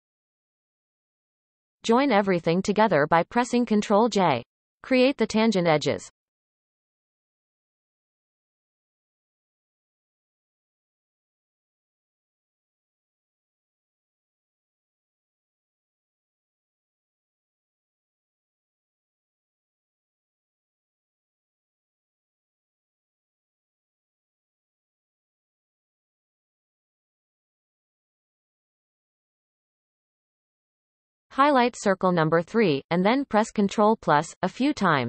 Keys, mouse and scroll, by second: 0.7 Tab, 3.0 shift+click, 3.8-4.7 scroll down 2, 5.9 ctrl+j, 6.8 Tab, 7.2-7.6 scroll up 1, 7.6-8.9 shift+middle drag, 8.9-10.4 scroll up 7, 10.4-10.7 scroll up 1, 10.9 click, 11.5 shift+middle click, 12.4-13.6 scroll down 8, 13.6 shift+middle click, 14.0-14.6 scroll up 5, 14.6 shift+middle click, 15.4-16.7 scroll up 3, 16.9 shift+click, 17.7 f, 18.0-19.1 scroll down 14, 19.1 shift+middle click, 19.5-19.9 scroll up 2, 19.9 shift+middle click, 21.5 drag, 22.8 drag, 23.3 scroll down 2, 23.7-25.1 shift+middle drag, 25.1-25.8 scroll up 4, 25.8-26.2 shift+middle drag, 27.7 shift+click, 28.5 f, 28.8-29.5 scroll down 9, 29.7-31.6 shift+middle drag, 31.6 scroll down 1.